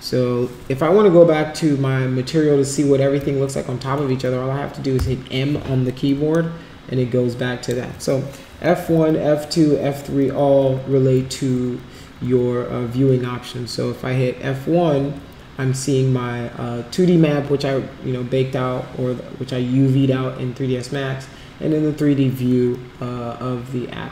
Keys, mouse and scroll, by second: 6.3-7.6 alt+drag, 8.5 F1, 10.0 F1, 10.2 F2, 10.9 F1, 11.1 F2, 11.9 F1, 12.2 F2, 12.7 F1, 15.1 F1.